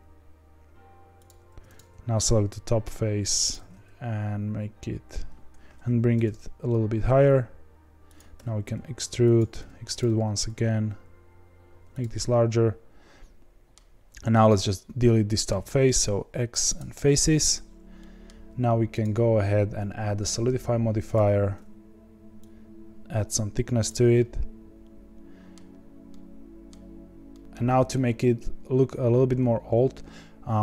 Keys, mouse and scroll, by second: 1.5 3, 1.7 click, 2.6 s, 3.6 g, 6.1 g, 8.3 e, 9.5 e, 10.0 s, 12.1-16.7 middle drag, 16.7 x, 17.9-21.1 middle drag, 21.1-24.1 drag, 24.1-25.7 middle drag, 25.7-26.0 scroll up 2, 26.0-30.6 middle drag.